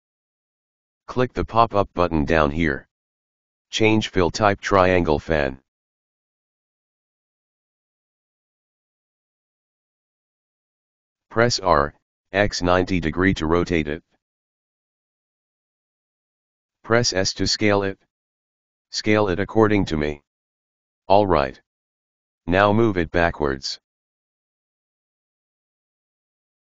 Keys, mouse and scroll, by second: 2.0-5.1 drag, 5.7-8.2 middle drag, 8.2 r, 15.5 s, 20.1 middle click, 20.7 g, 24.6-26.6 middle drag.